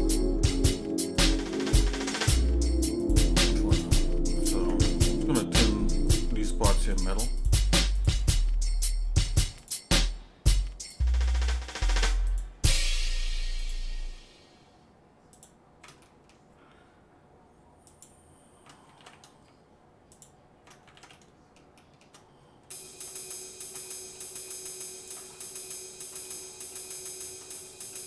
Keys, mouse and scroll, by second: 0.4 Tab, 1.1 click, 2.2 ctrl+Tab, 3.7 click, 4.4 click, 4.7 ctrl+Tab, 6.9 alt+shift+click, 7.4 alt+shift+click, 8.0 alt+shift+click, 9.7 alt+shift+click, 10.8 alt+shift+click, 12.5 alt+shift+click, 13.7 alt+shift+click, 15.4 alt+shift+click, 16.0 middle click, 17.8 alt+shift+click, 19.0 ctrl+z, 20.1 alt+shift+click, 20.9 ctrl+z, 21.1 middle click, 21.8 shift+middle click, 22.6 scroll up 2, 23.3 alt+shift+click, 23.9 middle click, 25.0 alt+shift+click, 25.3 middle click, 26.4 shift+middle click, 26.9 shift+middle click, 27.6 middle click.